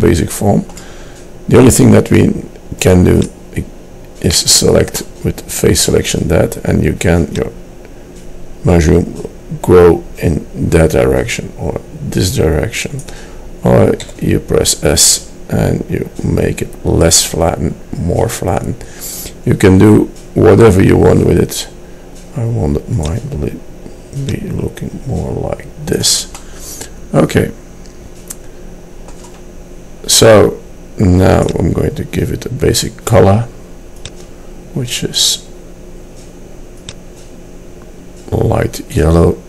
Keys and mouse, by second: 3.4-4.5 drag, 4.5-6.6 middle drag, 7.5-9.3 middle drag, 14.3 s, 24.2-26.3 drag, 29.9-31.5 middle drag, 31.5-33.4 drag, 33.4 middle click, 34.2-35.8 drag, 36.0 middle click, 36.9-38.7 drag, 38.9-39.4 middle drag.